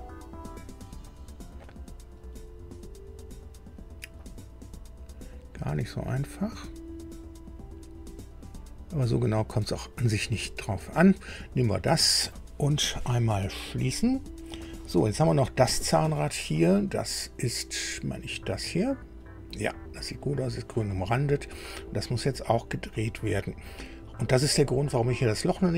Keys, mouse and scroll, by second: 10.8-11.4 scroll down 2, 13.9 click, 16.2-16.9 scroll up 2, 17.7 click, 21.3-21.7 scroll up 1.